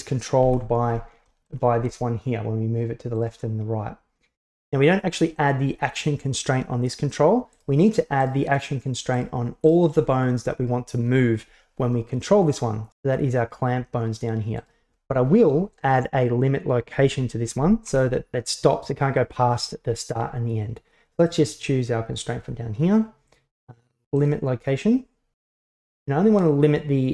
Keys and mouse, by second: 0.5 KP_1, 1.3 shift+middle drag, 1.8 g, 3.5-4.5 middle drag, 7.6-8.0 right drag, 8.3-9.3 shift+right drag, 9.7 shift+right click, 14.7 right click, 18.0 KP_1, 21.5-24.4 drag.